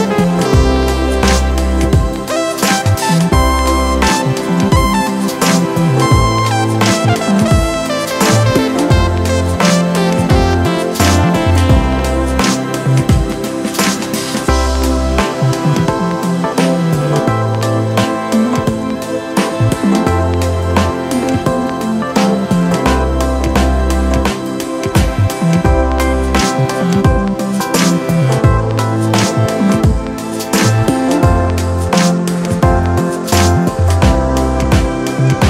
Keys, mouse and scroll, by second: 5.3 right click.